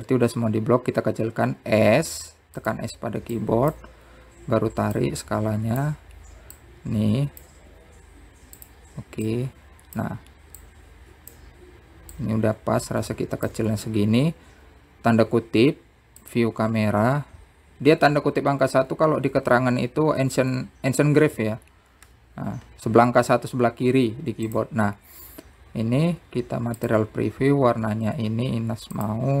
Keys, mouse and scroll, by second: 2.6 click, 3.3-4.3 scroll up 2, 4.3 click, 5.1 click, 5.8 click, 6.9 s, 8.5 click, 9.8 click, 11.4 click, 23.7 click, 25.2 z, 28.3 click, 29.2-29.4 drag.